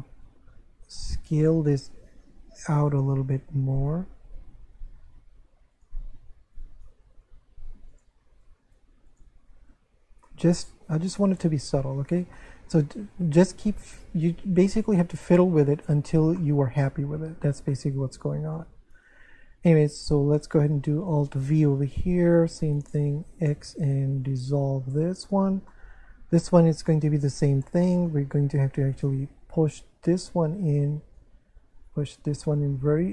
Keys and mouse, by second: 1.2 s, 3.8 right click, 4.4 s, 5.7 click, 6.5 right click, 7.9 click, 8.4 right click, 9.1 click, 9.6 Tab, 10.2 middle click, 12.3 shift+middle click, 15.4 shift+middle click, 16.4 shift+middle click, 17.7 middle click, 18.2 shift+middle click, 18.8 Tab, 20.4 right click, 21.5 alt+v, 22.2 click, 22.6 shift+right click, 23.6 x, 24.1 click, 25.7 middle click, 26.9 middle click, 27.8 shift+middle click, 28.9 right click, 30.0 click, 31.7 right click, 32.6 click.